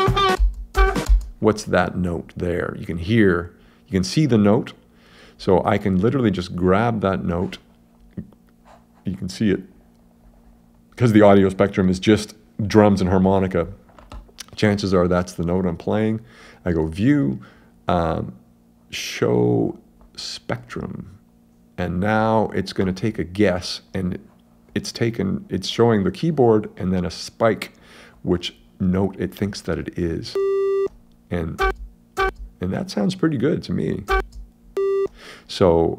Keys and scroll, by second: 31.6 space, 34.1 space.